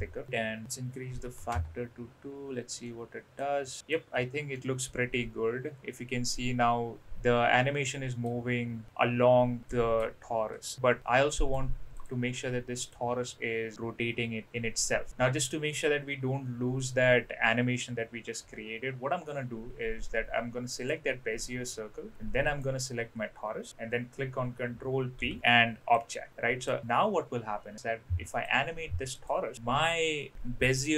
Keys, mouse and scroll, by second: 0.6-2.1 drag, 2.8-3.4 middle drag, 3.8 middle click, 4.6 middle click, 4.6 space, 7.0-9.7 middle drag, 11.0 space, 11.3 middle click, 11.9 click, 12.8 click, 20.7 click, 22.5 ctrl+click, 25.1 ctrl+p, 26.3 middle click, 28.3 click, 29.2 click.